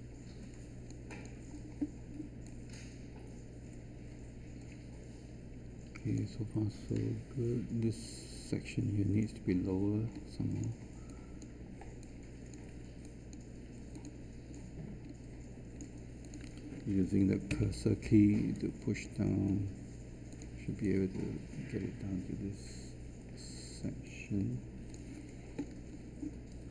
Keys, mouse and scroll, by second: 17.5 Down.